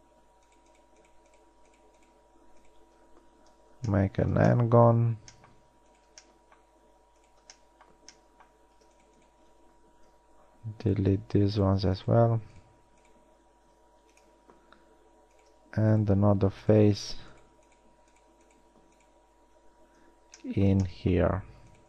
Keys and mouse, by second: 0.8 shift+right click, 3.7 f, 4.2-4.9 middle drag, 8.5 middle click, 10.3 f, 13.9 x, 20.2 f.